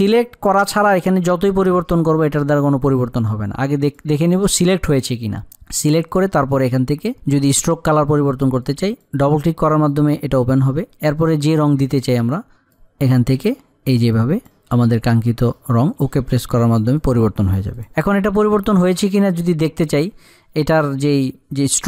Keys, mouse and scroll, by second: 3.6 click, 9.0-16.3 drag, 21.0 click.